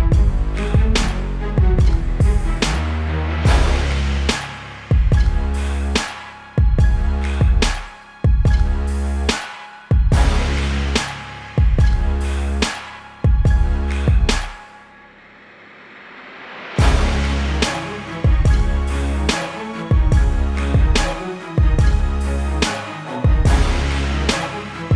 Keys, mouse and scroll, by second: 10.7 click, 17.1 click, 18.1 ctrl+l, 19.4 click.